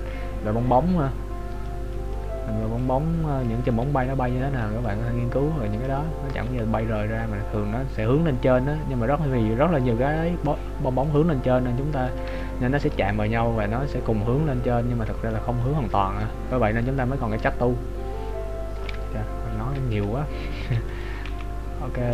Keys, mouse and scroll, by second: 2.1 middle click, 3.1 click, 3.9 middle click, 3.9 scroll up 1, 6.6 g, 11.6 middle click, 12.4 shift+middle click, 13.1 middle click, 15.8 middle click, 20.1 KP_3, 21.1 right click, 21.3 g.